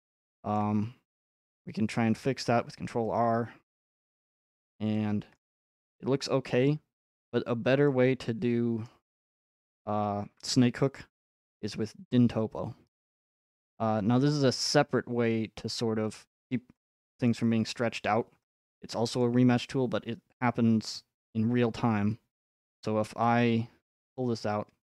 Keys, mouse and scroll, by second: 4.4 middle click, 5.3 middle click, 5.4 middle click, 5.5 middle click, 5.6 middle click, 6.1 middle click, 6.2 middle click, 8.9-10.9 middle drag, 13.7-15.8 drag, 15.9-17.3 scroll up 6, 18.3 middle click, 19.5 middle click, 24.2 click.